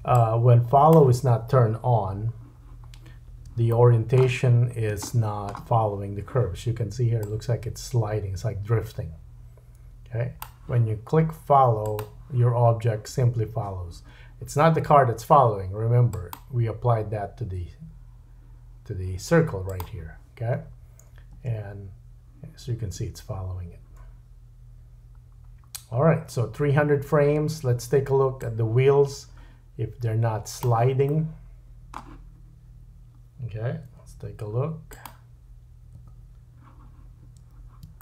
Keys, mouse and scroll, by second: 0.1-12.0 drag, 1.9 KP_7, 2.6-3.2 scroll up 3, 3.7 shift+middle click, 4.4-4.9 scroll up 4, 5.1 shift+middle click, 12.0-13.4 middle drag, 16.1 click, 19.6 click, 20.6-21.3 scroll down 3, 21.3 space, 23.9-28.4 middle drag, 27.4 space, 28.4-35.1 drag, 31.1 middle click, 33.8 KP_Decimal, 35.1-38.0 middle drag, 36.0 KP_Decimal.